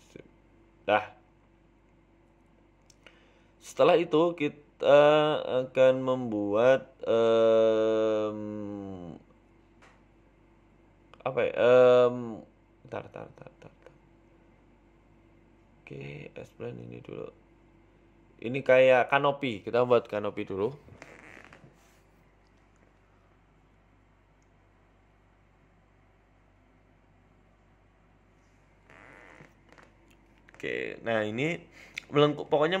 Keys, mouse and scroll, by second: 0.4 g, 2.1-2.5 scroll down 4, 2.4 z, 2.9-3.2 scroll down 2, 3.1 middle click, 3.6-4.0 scroll up 4, 3.9 middle click, 4.2 shift+middle click, 4.5 scroll up 1, 5.2 g, 6.9 scroll down 2, 7.0 middle click, 7.8 scroll down 3, 8.4 ctrl+s, 11.5 KP_1, 12.0-12.7 scroll up 2, 12.8-13.5 scroll up 1, 12.8 z, 13.8 right click, 14.2 shift+s, 15.2-15.5 scroll up 5, 15.3 shift+middle click, 15.6 shift+a, 18.3 g, 19.8 s, 21.5 s, 24.6 KP_3, 24.9 scroll down 2, 25.1 shift+middle click, 25.3 Tab, 25.6 click, 26.4 g, 29.6 ctrl+r, 30.7 g, 32.0 click, 32.2 g.